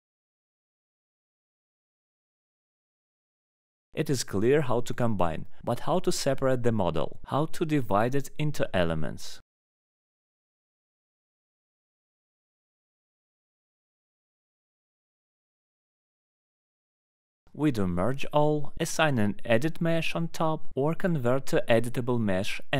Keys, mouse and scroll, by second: 1.6 shift+click, 2.1 scroll, 2.5 click, 3.0 middle click, 3.2 middle click, 4.4 click, 6.9 click, 7.6 middle click, 8.2 scroll, 8.3 click, 9.5 click, 10.9 click, 13.6 alt+middle click, 13.9 scroll down 1, 15.2 click, 19.4 alt+middle click, 19.7 click, 19.9 scroll down 1, 20.0 middle click, 20.3 click, 21.7 alt+middle click, 21.8 middle click, 22.2 middle click.